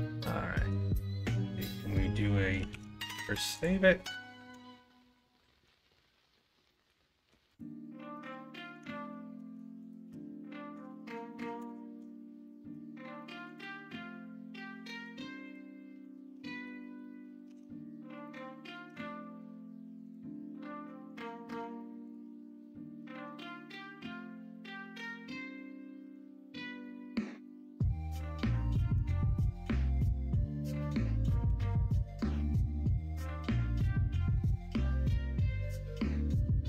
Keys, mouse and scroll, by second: 2.7 ctrl+s, 6.6 middle drag, 11.6 ctrl+KP_Add, 12.4-12.7 middle drag, 13.7-14.5 middle drag, 14.8 middle click, 16.0 middle click, 16.5 Tab, 16.8 middle click, 17.4 Tab, 18.2 alt+z, 18.9 Tab, 19.3 middle click, 20.3 middle click, 22.7 middle click, 23.1 alt+z, 23.3 middle click, 24.0 middle click, 24.5 middle click, 24.9 middle click, 26.3 middle click, 27.4 middle click, 29.5 Tab, 31.5 ctrl+KP_Subtract, 32.6-34.2 middle drag, 34.3-35.7 middle drag.